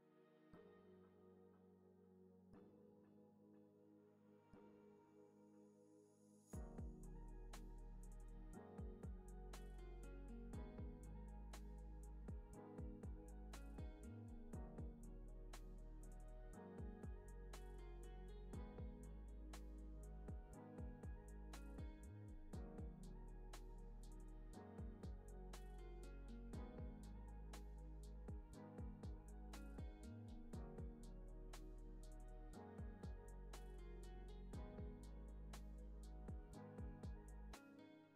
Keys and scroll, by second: 0.4 super+c, 0.7 super+v, 1.9 z, 2.4 c, 3.8 super+c, 4.4 super+v, 5.0 super+c, 5.3 super+v, 7.1 c, 7.6 super+s, 10.1 super+c, 10.3 super+v, 11.1 super+c, 11.4 super+v, 11.4 super+s, 16.4 space.